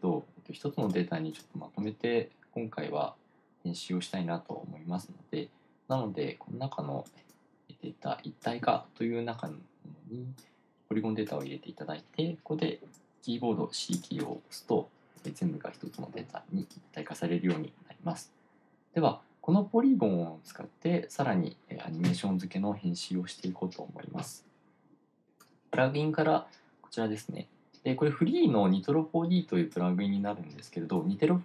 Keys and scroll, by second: 14.7 c.